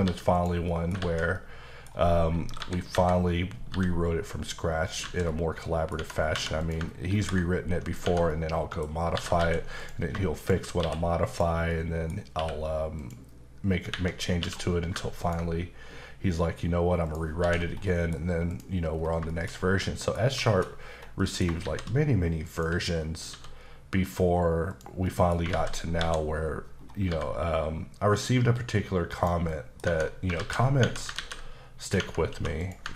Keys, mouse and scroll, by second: 0.0 g, 0.3 click, 0.7 middle click, 1.0 alt+z, 1.3 middle click, 2.6 KP_7, 3.7 g, 4.9 click, 5.3 middle click, 5.9 Tab, 6.3 2, 6.6 click, 7.2 ctrl+b, 7.8 click, 8.0 Tab, 8.3 middle click, 9.1 typing, 9.8 click, 10.4 shift+click, 10.8 q, 11.3 click, 11.7 middle click, 12.3 q, 13.0 click, 14.4 q, 14.5 q, 15.2 ctrl+click, 17.4 h, 17.7 scroll down 1, 17.9 middle click, 18.2-18.5 scroll up 1, 18.5 click, 18.9-19.8 scroll down 5, 19.3 shift+middle click, 19.8 middle click, 20.4 shift+middle click, 20.9 scroll down 1, 21.2 middle click, 21.6 shift+a, 22.5 click, 23.3 s, 24.7 click, 25.0 middle click, 25.5 alt+z, 26.0 KP_7, 26.8-27.1 scroll up 1, 27.1 g, 29.5 middle click, 29.9 Tab, 30.4 alt+z, 30.8 Tab, 31.1 ctrl+a, 31.8 click, 32.0 Tab, 32.3 2, 32.6 click.